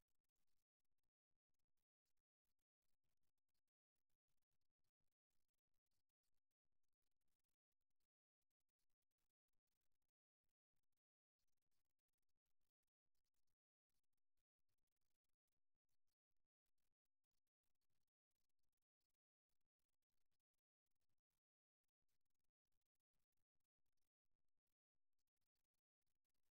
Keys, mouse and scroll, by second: 3.7-5.9 middle drag, 5.9-9.2 drag, 9.7-11.6 right drag, 13.7-15.5 drag, 16.5-18.1 drag, 18.1-20.2 right drag, 20.7-23.4 middle drag, 23.4 a, 23.7 a.